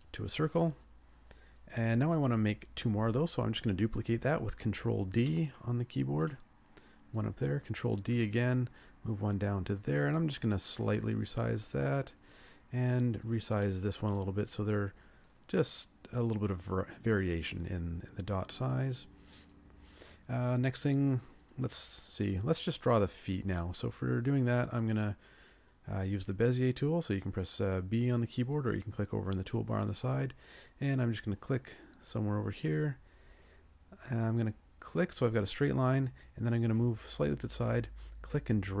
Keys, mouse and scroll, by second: 5.3 ctrl+d, 7.9 ctrl+d, 10.8 ctrl+click, 14.2 ctrl+click.